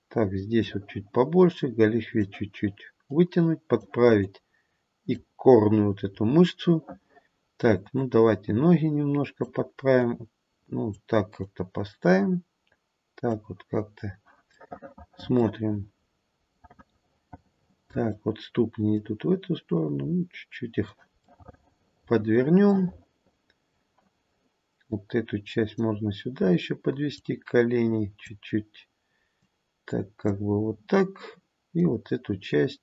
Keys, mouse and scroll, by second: 1.4 click, 3.0 click, 4.2 click, 5.4-6.1 scroll down 1, 6.1-6.9 scroll down 4, 7.9 click, 10.0 click, 11.4 click, 15.6-16.0 scroll down 2, 16.0-16.4 scroll up 2, 16.4 middle click, 17.4 middle click, 18.9 click, 21.2 middle click, 22.7 middle click, 24.8 click, 27.1 click, 29.3 click, 31.8 click.